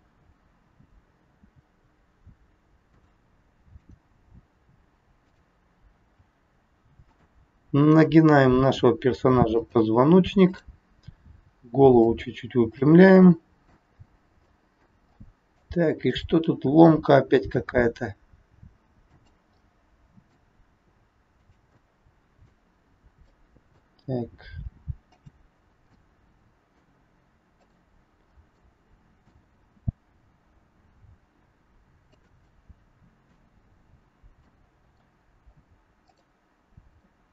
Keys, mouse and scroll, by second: 1.3 g, 3.8 click, 5.1 click, 5.9 g, 7.7 click, 8.6 g, 10.5 click, 11.2 g, 12.7 middle click, 14.3 scroll up 1, 14.6 middle click, 16.1 click, 17.3 r, 19.6 middle click, 20.7 r, 21.7 middle click, 24.3 r, 26.0 middle click, 27.4 click, 28.2-28.7 scroll down 2, 28.6 middle click, 29.6 r, 32.6 middle click, 32.6 scroll up 1, 33.7 scroll up 2, 34.4 middle click, 34.4 scroll up 1, 36.1 click, 36.9 middle click.